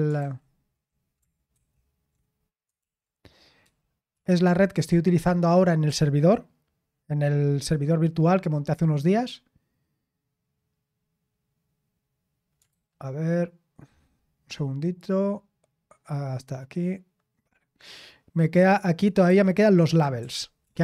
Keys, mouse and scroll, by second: 0.0-4.6 typing, 12.6 super+h, 18.6 click, 19.2 Escape, 19.8-20.8 typing.